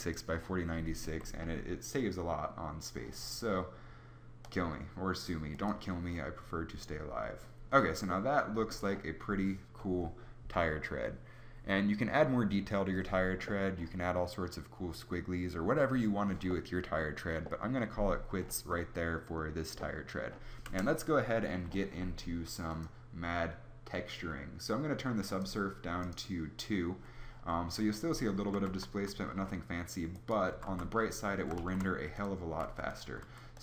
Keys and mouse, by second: 2.0 Tab, 20.6 KP_0, 28.6 shift+z, 30.5 z, 30.6 z, 31.5 shift+a, 32.5 s, 33.1 s.